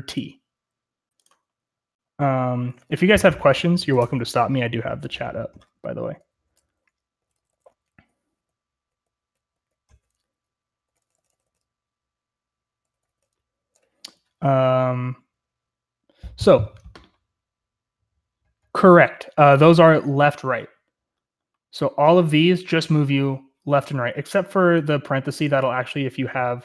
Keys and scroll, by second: 7.1-12.9 typing.